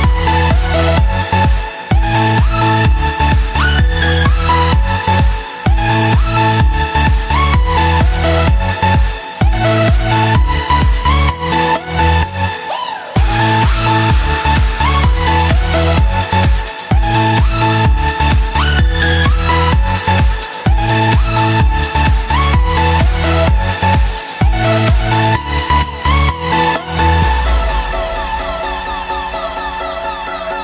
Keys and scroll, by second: 11.2 ctrl+s, 20.5 F6, 24.2 F7, 25.2 alt+BackSpace.